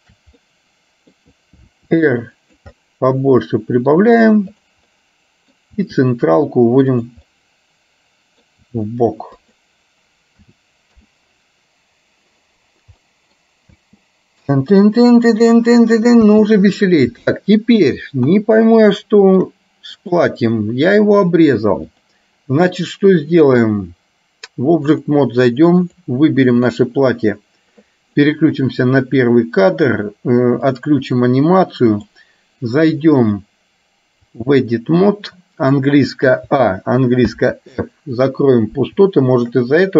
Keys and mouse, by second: 0.1 shift+click, 0.5 middle click, 1.8 r, 2.8-4.1 middle drag, 5.1 middle click, 6.0 r, 7.3-8.6 middle drag, 8.8 r, 10.6 a, 11.2 i, 13.2 middle click, 13.8 space, 16.5 space, 18.3 KP_1, 19.1 shift+middle click, 20.1 click, 22.1-25.3 drag, 25.8 click, 28.8 click, 30.8 click, 32.1 click, 33.5-34.7 drag, 37.3 f, 39.1 shift+middle click.